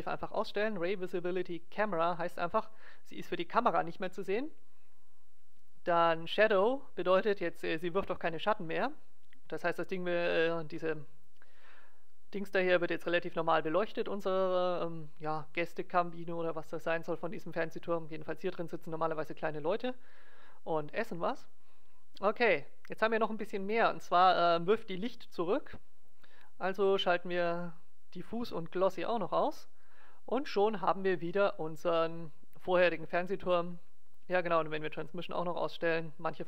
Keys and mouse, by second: 0.9 middle click, 1.8-3.5 drag, 5.8-7.5 drag, 27.6-30.8 drag, 35.0-36.4 drag.